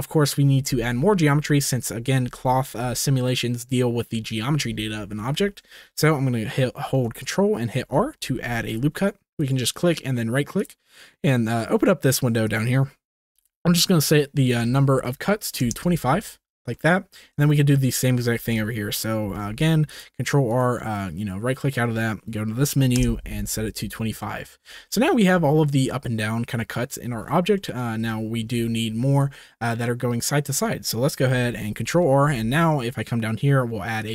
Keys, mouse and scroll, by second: 4.5 ctrl+s, 7.7 ctrl+r, 10.5 click, 12.5-15.6 drag, 16.7 middle click, 17.4 shift+middle click, 19.2 ctrl+r, 21.6-24.2 drag, 24.2 middle click, 25.0 shift+middle click, 27.5 middle click, 28.0 shift+middle click, 31.8 ctrl+r.